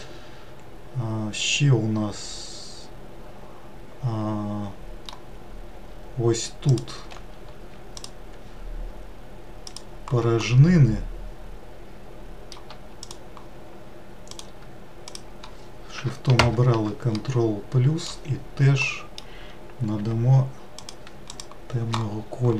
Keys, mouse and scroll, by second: 5.2-6.2 scroll up 2, 6.5 click, 9.5 shift+click, 10.2-12.9 middle drag, 12.9 shift+click, 14.1 shift+click, 16.1 ctrl+KP_Add, 16.9-19.7 middle drag, 19.7 g, 21.1 click, 21.9 scroll down 2, 22.4-22.5 middle drag.